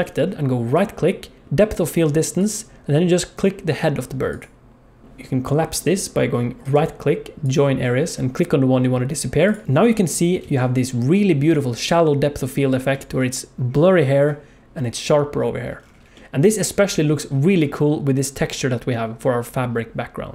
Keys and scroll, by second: 10.4 ctrl+s.